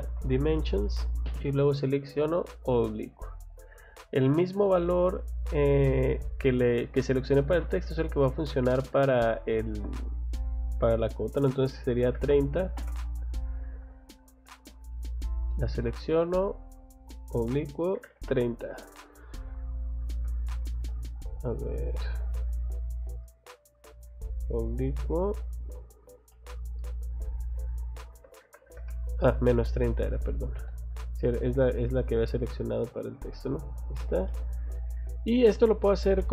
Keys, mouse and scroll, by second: 0.6 click, 2.7 click, 13.7 click, 13.9 click, 15.1 click, 16.1 click, 19.9 scroll down 1, 20.2 click, 20.4 click, 22.1 click, 24.0 click, 29.6 Escape, 30.0 click, 32.4 click, 32.6 click, 33.3 click, 33.5 click, 34.3 middle click, 35.7 click, 35.9 click, 36.2 middle click.